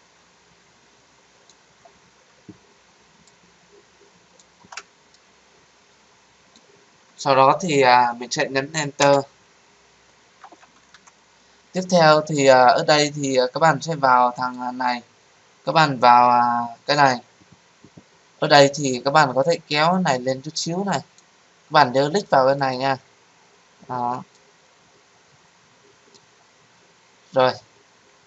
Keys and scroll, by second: 8.9 Return.